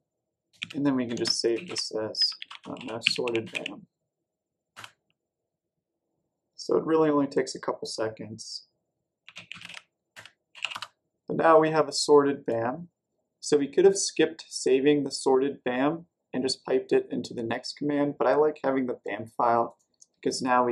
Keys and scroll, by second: 0.5-4.0 typing, 4.7 Return, 8.9-11.0 typing, 20.5-20.7 typing.